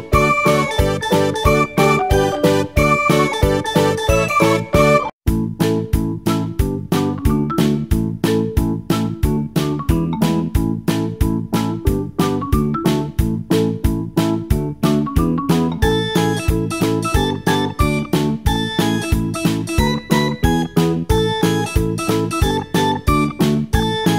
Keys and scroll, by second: 21.8-23.6 typing.